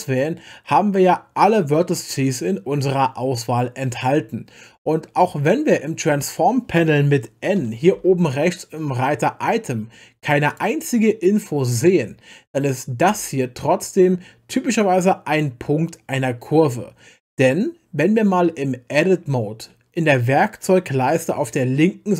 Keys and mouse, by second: 7.9 n, 10.5 click, 15.3 click.